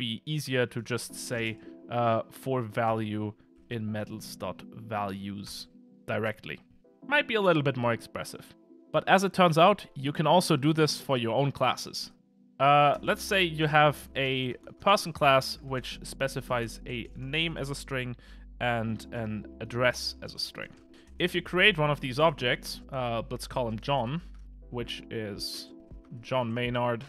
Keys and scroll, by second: 3.7 Return.